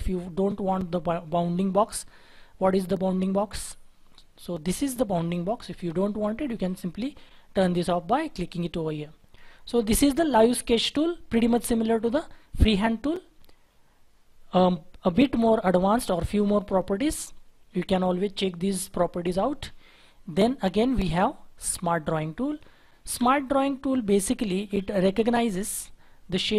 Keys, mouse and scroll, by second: 23.0 Delete, 24.4 shift+F4.